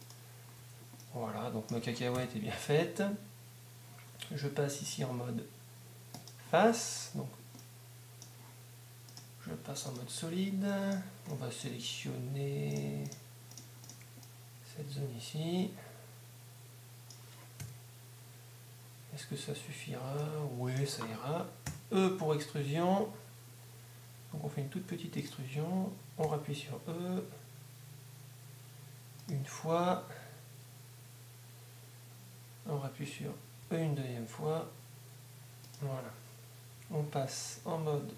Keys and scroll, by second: 0.6 Tab, 23.0 e, 26.8 e.